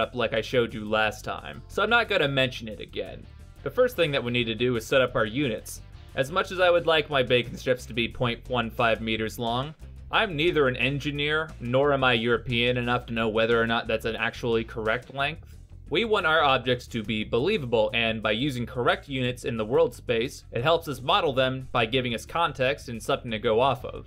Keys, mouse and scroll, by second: 5.5 middle click, 23.7 middle click.